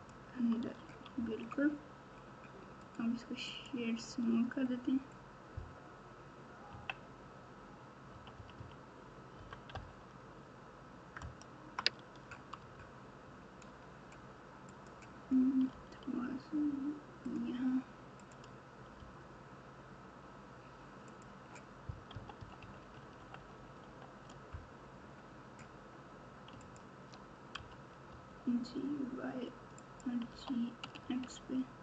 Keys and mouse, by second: 0.7 Tab, 2.8 right click, 6.6 KP_3, 8.1 KP_6, 8.3 KP_6, 9.3 KP_4, 9.7 KP_8, 11.2 KP_Add, 11.7 KP_Add, 12.4 KP_Add, 12.6 Tab, 14.7 click, 15.7 g, 18.9 g, 22.1-23.5 typing, 26.6 click, 27.5 g, 30.3 g.